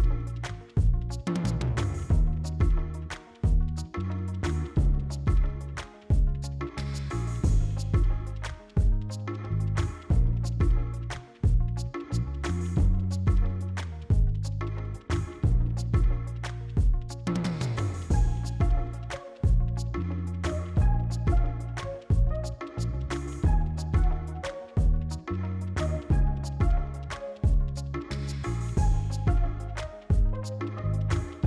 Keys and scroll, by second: 0.1 c, 1.0 e, 2.4 c, 5.2 r, 5.5 r, 6.9 s, 7.5 s, 8.2 s, 10.8 s, 12.6 s, 14.9 s, 17.6 q, 19.5 s, 20.9 c, 23.6 c, 24.6 s, 25.9-29.1 typing, 30.4 s.